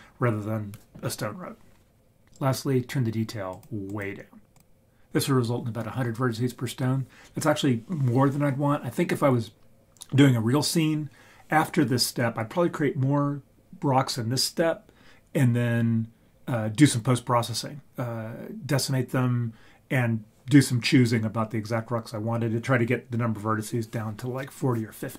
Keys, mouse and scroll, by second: 2.2-2.6 scroll down 2, 3.5 click, 3.9 click, 4.5 click.